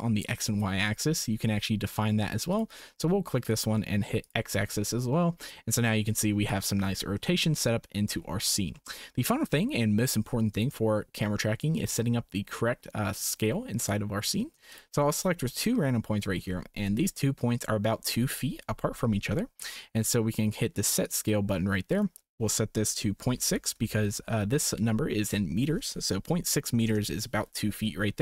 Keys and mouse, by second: 2.5 click, 4.2 click, 8.7 shift+click, 14.7 shift+click, 21.0 click, 22.1-27.0 drag.